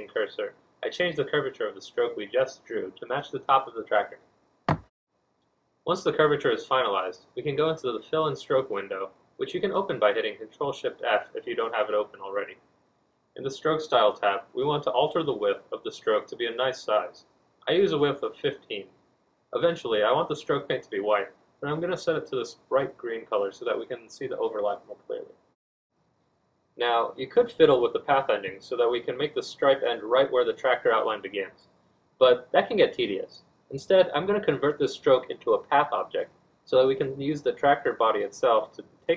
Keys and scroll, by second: 6.8 1, 7.0 Return, 10.4 1, 13.6 F1, 28.1 ctrl+d, 31.5 z, 32.8 F2, 34.3 z.